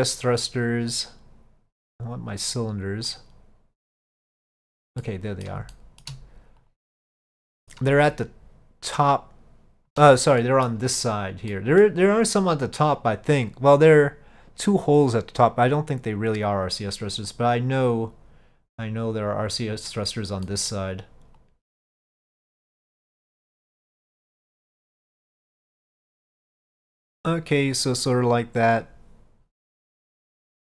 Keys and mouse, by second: 0.4 click, 2.1-3.3 drag, 4.0 click, 5.1-5.5 middle drag, 5.8-6.1 shift+middle drag, 6.7 click, 7.4-7.8 middle drag, 8.2-10.0 shift+middle drag, 10.5 middle drag, 11.6 middle drag, 17.4 click, 19.1 click, 20.5 middle click, 21.5-23.0 drag, 23.8-25.3 drag, 25.5-26.9 middle drag.